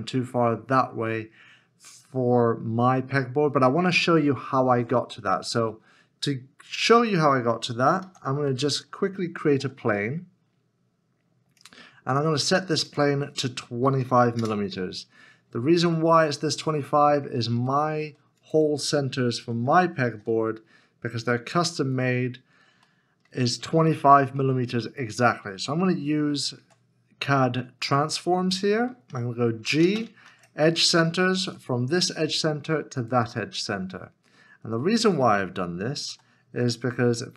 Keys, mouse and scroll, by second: 6.7 Tab, 8.5 alt+z, 8.7 middle click, 9.9 shift+a, 13.9 2, 14.4 Return, 14.4 5, 16.7 middle click, 18.9 shift+middle click, 19.4 g, 20.9 shift+z, 22.9 shift+middle click, 26.6 alt+c, 29.8 space, 30.2 shift+e, 36.6 w.